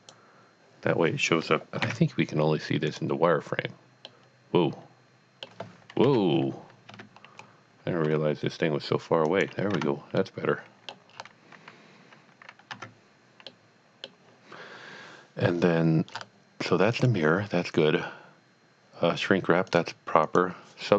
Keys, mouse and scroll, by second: 1.8 z, 2.9 click, 4.1 middle click, 5.1-6.1 middle drag, 6.1 KP_7, 6.9 Tab, 7.5-8.0 scroll down 1, 8.0 scroll down 1, 8.1 g, 9.3 click, 9.7 Tab, 10.6 middle click, 11.2-12.3 scroll up 1, 12.7 Tab, 13.5 middle click, 15.6 scroll down 1, 16.1 scroll up 1, 16.9 click, 19.7 click, 20.3 click.